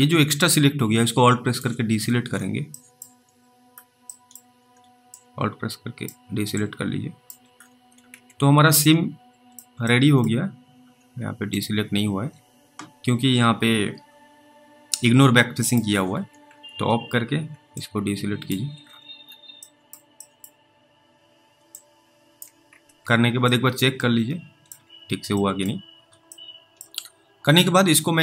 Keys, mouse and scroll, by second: 0.8 alt+click, 1.9-2.9 scroll down 1, 2.9 scroll down 1, 3.0 middle click, 3.3-4.0 scroll up 3, 4.4 middle click, 4.6 scroll up 1, 5.4 alt+click, 6.8 alt+click, 7.5-8.1 scroll down 2, 8.1 alt+w, 8.4 alt+w, 9.1 alt+middle click, 10.4 middle click, 10.4-10.9 scroll up 2, 11.5 ctrl+click, 15.6 ctrl+click, 16.2 alt+w, 16.5 alt+w, 17.0-17.5 scroll up 3, 18.0 alt+click, 18.8-19.4 scroll down 1, 19.9-20.4 scroll down 1, 20.4 middle click, 20.5 middle click, 21.0-21.5 scroll up 3, 22.0 alt+click, 22.7 alt+w, 23.0 alt+w, 23.8 alt+middle click, 24.9-25.6 scroll down 2, 25.9 middle click, 25.9 scroll up 1, 26.6 alt+middle click.